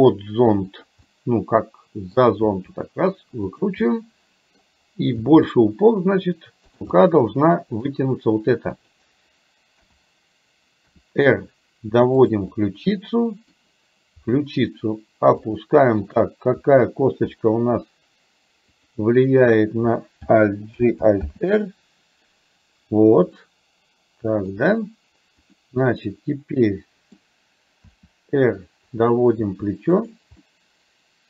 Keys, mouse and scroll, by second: 1.1-2.2 middle drag, 2.5 r, 4.0 middle click, 5.3 g, 7.0-7.6 scroll up 1, 7.6 middle click, 8.8 click, 9.8 KP_7, 11.0 r, 12.6-13.6 middle drag, 14.2 r, 16.1 click, 16.8 KP_1, 18.7 click, 20.8 alt+g, 21.3 alt+r, 23.5-24.6 middle drag, 26.0-27.2 middle drag, 28.0 r, 29.5 r, 30.5-31.2 middle drag.